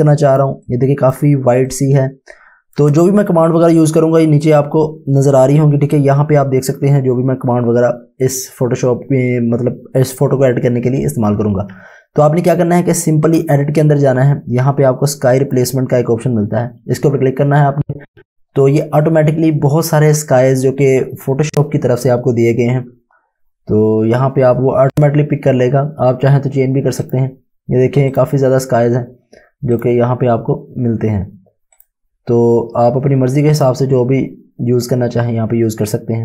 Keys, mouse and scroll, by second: 0.0 space, 0.3 space, 0.8 click, 1.8 click, 5.2 space, 13.3 space, 13.3 click, 27.1 click, 32.8-33.2 scroll down 1, 33.6 click.